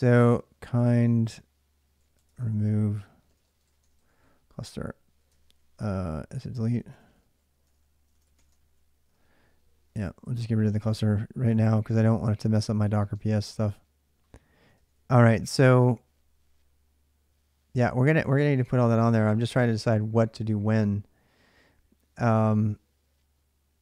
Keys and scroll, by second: 0.0-8.9 typing, 12.4-13.5 typing, 14.5 ctrl+a, 14.7 ctrl+a, 18.4 alt+Tab.